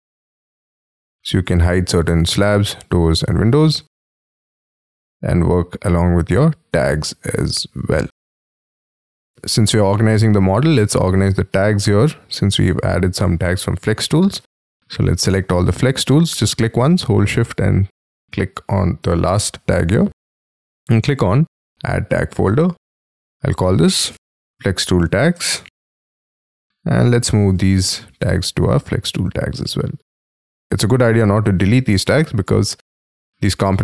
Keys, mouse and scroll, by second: 1.2 double click, 1.2 double click, 3.8 double click, 5.8 double click, 9.8 middle click, 15.4 shift+click, 23.6-25.7 typing, 27.3 shift+click.